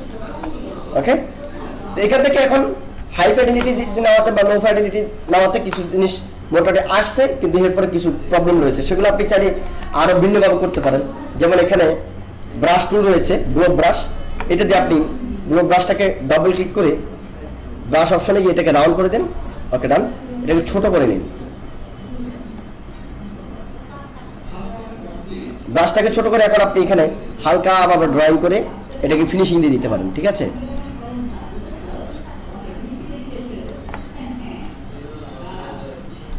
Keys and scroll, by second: 3.2 ctrl+=, 9.7 ctrl+=, 10.7 ctrl+=.